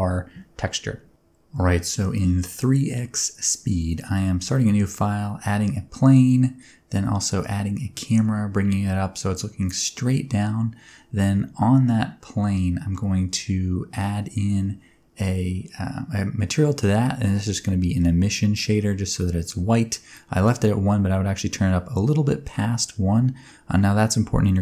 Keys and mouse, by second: 1.7-2.9 right drag, 3.5 a, 3.6 x, 4.3 Tab, 4.8 s, 5.0 click, 5.1 Tab, 5.3 middle click, 5.4 shift+a, 6.1 alt+g, 6.1 alt+h, 6.6 alt+g, 6.7 alt+r, 7.1 z, 7.3 click, 7.7 click, 8.6 KP_0, 9.0 middle click, 9.2 g, 9.2 z, 9.7 click, 9.9 shift+middle click, 10.4 middle click, 11.6 click, 13.6-14.0 drag, 14.4 click, 15.1 click, 15.8 click, 17.0 click, 17.1 click, 17.3 shift+s, 18.4 click, 19.2 click, 19.9 click, 20.3 shift+middle click, 21.5 click, 22.0 click, 22.4 click, 22.8 click, 24.1 click, 24.3 shift+a.